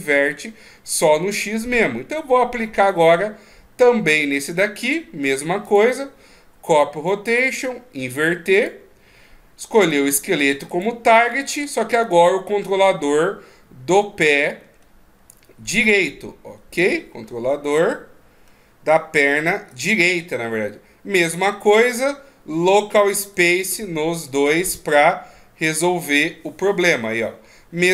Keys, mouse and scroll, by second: 2.9 right click, 4.0 click, 7.3 click, 8.5 click, 10.7 click, 21.7 click, 24.2 click, 26.8 middle click.